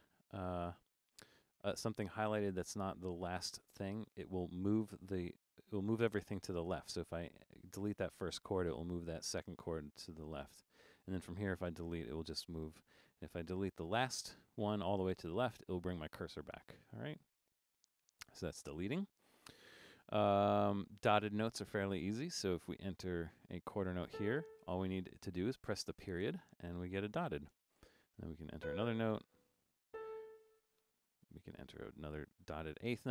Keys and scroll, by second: 0.3 Left, 8.8 BackSpace, 11.7 BackSpace, 12.3 BackSpace, 15.5 BackSpace, 23.3-24.6 typing, 26.3 ., 27.6-28.6 typing, 29.9-31.8 typing.